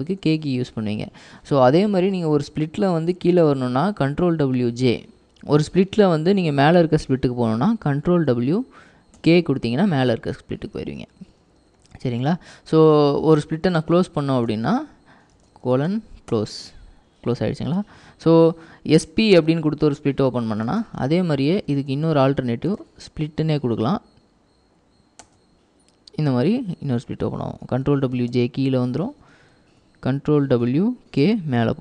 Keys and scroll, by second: 0.0-0.9 typing, 8.3 ctrl+w, 9.3 typing, 11.0-11.8 typing, 15.3-16.5 typing, 21.6-23.7 typing, 25.3 Return, 26.1-27.0 typing, 28.1 ctrl+w, 28.1-29.5 typing, 30.6 ctrl+w, 31.3 k.